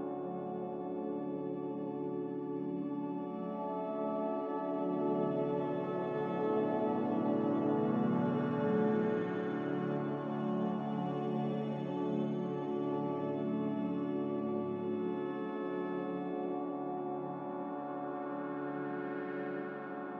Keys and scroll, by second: 9.0 b, 9.8 b, 14.6 Delete, 15.2 m, 18.7 a.